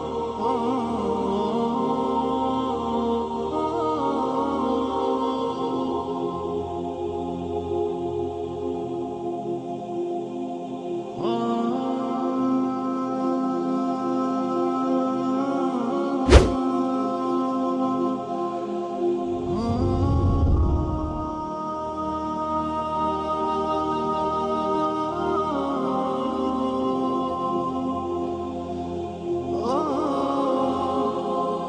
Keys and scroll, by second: 0.2 Down, 1.6 Up, 4.5 Down, 4.6 Down, 4.7 Down, 4.8 Down, 5.0 Down, 5.0 Down, 6.8 Down, 6.9 Down, 9.3 Down, 10.5 Down.